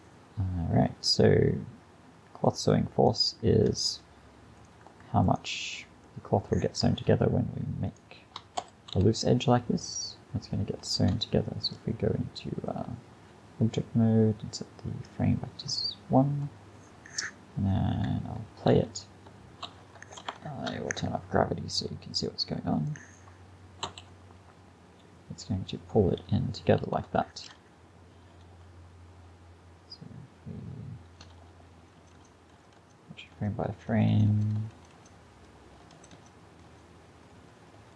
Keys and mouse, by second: 2.5-10.1 drag, 6.1-7.9 middle drag, 8.6 f, 9.0 a, 10.1 middle click, 11.0 Tab, 18.7 alt+a, 19.7 alt+a, 20.5 shift+Left, 23.9 alt+a, 26.8 alt+a, 28.5-31.5 Left, 31.6 Left, 31.8 Left, 32.0 Left, 32.2 Left, 32.6 Left, 32.8 Left, 33.4 Left, 33.8 Left, 34.0 Left, 34.2 Left, 34.4 Left, 34.6 Left, 34.8 Left, 35.0 Left, 35.8 Left, 36.0 Left, 36.2 Left, 36.7 Left, 37.4 Right, 37.6 Right, 37.8 Right.